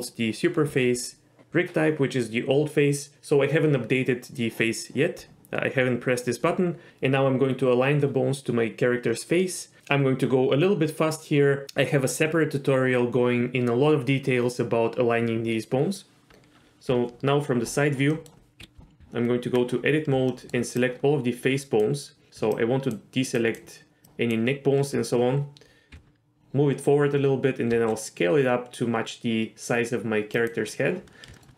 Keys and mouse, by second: 16.9 KP_3, 18.2 middle drag, 18.6 KP_3, 19.0 Tab, 20.3 shift+middle click, 20.8-21.8 drag, 22.6 ctrl+click, 23.3 ctrl+click, 24.0 ctrl+click, 25.9 g, 27.7 s, 31.3 shift+middle click.